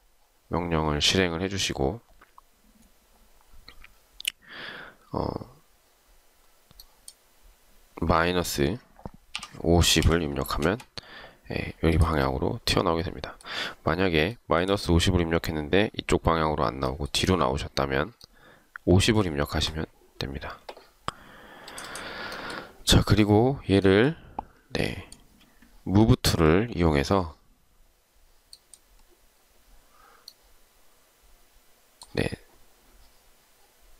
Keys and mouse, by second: 9.3-10.6 typing, 10.7 Return, 14.5 shift+right click.